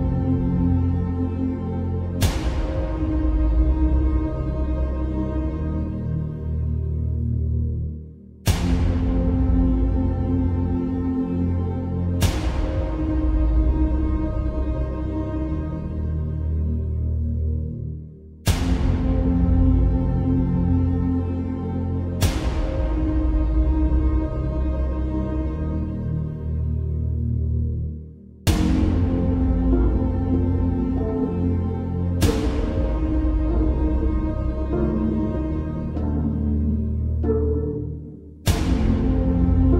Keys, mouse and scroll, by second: 2.8 click, 6.9 Return, 9.9 shift+Num_Lock, 10.2-13.3 shift+drag, 13.9-16.1 shift+drag, 19.7 Return, 21.7 ctrl+j, 23.5-26.6 ctrl+drag, 29.8 ctrl+j, 31.1 click, 32.0-35.5 ctrl+drag.